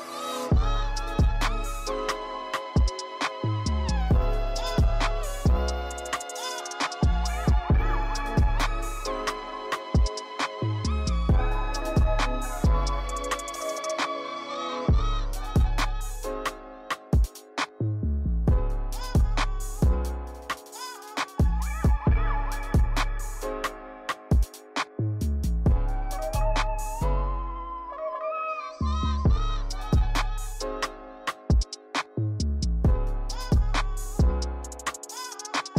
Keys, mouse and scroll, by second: 5.0 click, 5.6-6.4 scroll up 10, 6.4-7.7 shift+middle drag, 7.7 g, 9.2 KP_0, 18.9 scroll down 1, 20.0-20.5 scroll down 2, 20.5 click, 21.8 click, 22.5 scroll down 5, 24.1 s, 25.5 KP_0, 26.8-29.8 drag, 29.8 scroll up 1.